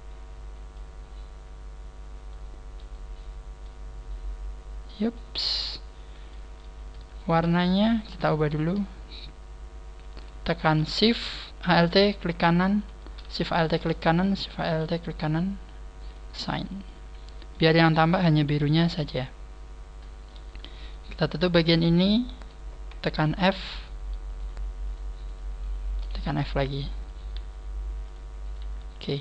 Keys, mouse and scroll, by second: 0.9-2.7 scroll down 3, 2.8 right click, 3.6 middle click, 5.0 right click, 5.4 scroll down 1, 5.8 scroll up 1, 6.2 middle click, 7.0 middle click, 7.0 alt+shift+right click, 7.0 scroll down 1, 7.8 alt+shift+right click, 8.4 alt+shift+right click, 10.1 a, 12.5 alt+shift+right click, 16.1 alt+shift+right click, 16.1 click, 16.4 a, 16.8 middle click, 18.4 click, 18.4 KP_3, 18.9 scroll down 1, 19.3-20.0 scroll up 3, 20.4 scroll up 1, 20.8 right click, 21.1 shift+right click, 21.2 shift+right click, 21.7 shift+right click, 21.9 shift+right click, 23.5 f, 24.2 right click, 24.8 shift+right click, 25.2 shift+right click, 25.2 shift+right click, 25.5 shift+right click, 26.2 f, 27.2 shift+right click, 27.4 g, 28.1 click, 28.4 right click, 28.6 g.